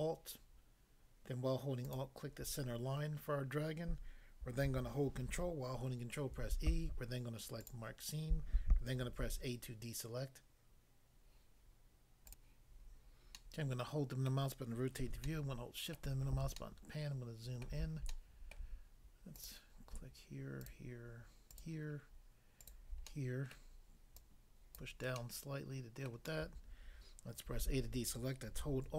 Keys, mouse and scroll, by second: 1.8 alt+click, 6.3 ctrl+e, 7.6 click, 9.2 a, 12.3 click, 13.4 middle click, 14.3 middle click, 15.2 shift+middle click, 18.1 shift+middle click, 19.4 click, 19.4 click, 20.7 shift+click, 22.6 shift+click, 23.0 middle click, 23.6 middle click, 24.2 click, 24.7 click, 25.2 middle click, 26.1 middle click, 27.6 a.